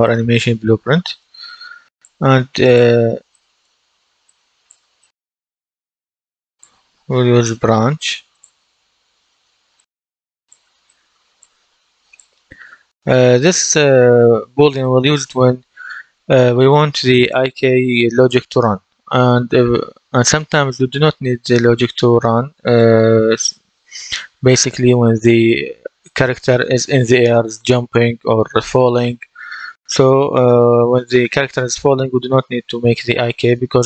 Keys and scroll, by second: 6.7-7.8 typing.